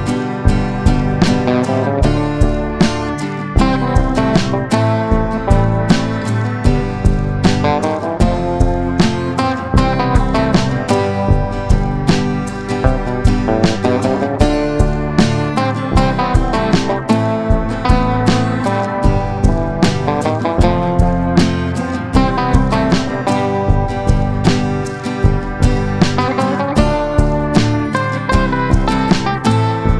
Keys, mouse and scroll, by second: 3.5 shift+click, 3.9 shift+click, 5.2 ctrl+g, 5.6-8.6 drag, 10.0-15.6 drag, 16.2-20.4 drag, 20.8 ctrl+g, 22.0 shift+click, 23.3-28.8 drag, 29.2 click.